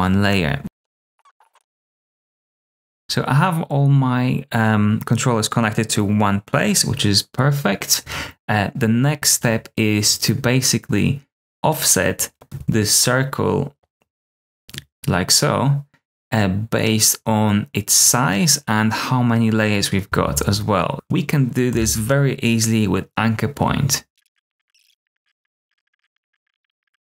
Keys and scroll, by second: 20.1 super+z, 21.6 a, 24.1 super+z, 24.3-26.2 typing, 24.5 super+a, 24.6 super+v, 25.0 shift+Up, 25.1 shift+Down, 25.1 super+x, 25.2 super+v, 25.4 super+x, 26.3 super+x, 26.3 super+v, 26.4 super+x, 26.7 super+c.